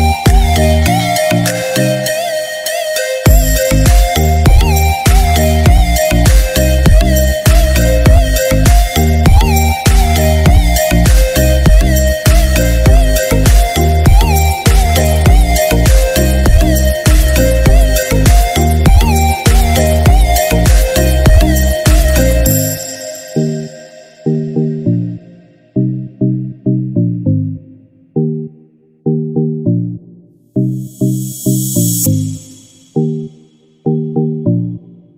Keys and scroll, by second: 6.9 ctrl+d, 13.6 ctrl+-.